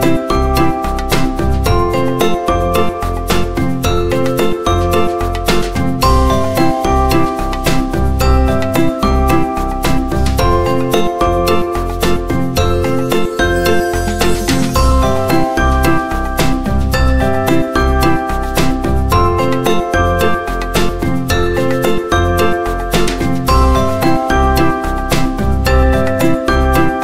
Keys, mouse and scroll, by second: 0.8 click, 4.4 click, 8.3 click, 10.3 scroll down 1, 10.8 click, 11.8-12.3 scroll up 1, 12.9 click, 16.3-18.2 alt+drag.